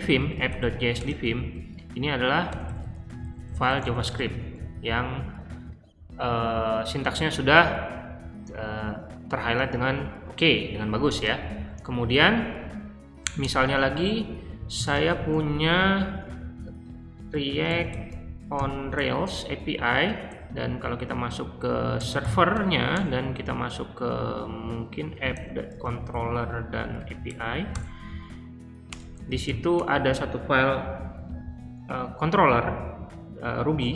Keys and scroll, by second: 0.0-0.9 typing, 2.2-4.3 typing, 4.5 ctrl+f, 11.3-12.6 typing, 13.4 Return, 14.3-19.0 typing, 20.3 Tab, 21.9-22.9 typing, 25.0-27.7 typing, 28.8 Return, 29.0-29.8 typing.